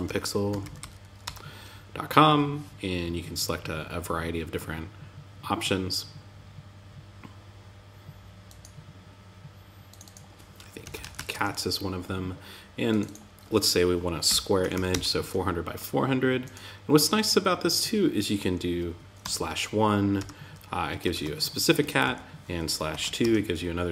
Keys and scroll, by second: 0.6 Return, 10.7 Return, 14.2 Return, 19.5 Return, 20.5 super+l, 21.1 Right, 21.4 Left.